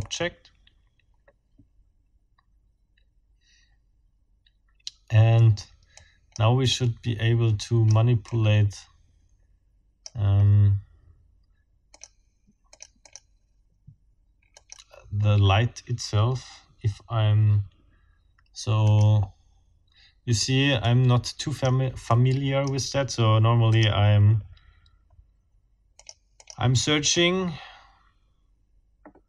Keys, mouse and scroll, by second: 0.0-0.3 scroll up 2, 5.9 click, 6.7-8.1 drag, 8.3-10.3 drag, 11.9 click, 12.7-13.3 drag, 14.5 click, 18.9 click, 20.8 click, 22.1 click, 23.7 click, 24.4 scroll down 2, 25.1 scroll down 2, 25.9 click, 26.4 click, 27.0 click, 27.9 scroll down 2.